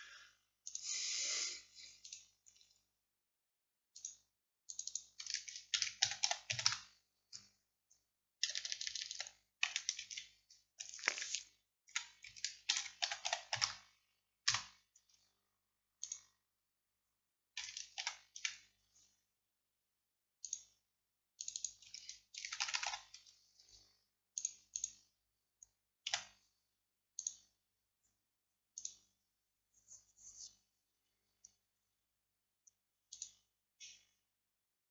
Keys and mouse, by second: 2.1-4.0 middle drag, 4.0-7.5 drag, 8.6 BackSpace, 16.1-18.1 drag, 18.1 ctrl+i, 20.5-21.6 drag, 22.8 o, 23.5-24.8 drag, 26.1 a.